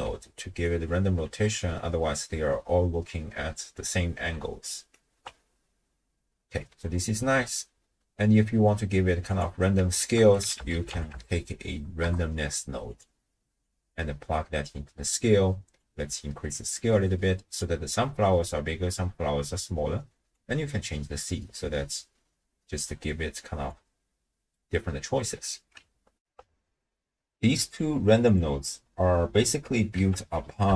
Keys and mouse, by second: 0.5 ctrl+alt+click, 4.7 ctrl+alt+click, 9.3 click, 10.0 ctrl+a, 11.5 s, 13.7-14.7 drag, 15.8-17.6 drag, 20.3-23.7 drag, 26.2 ctrl+alt+shift+q, 27.7 click, 28.3 click, 29.0 click, 29.0 right click, 30.0 ctrl+a.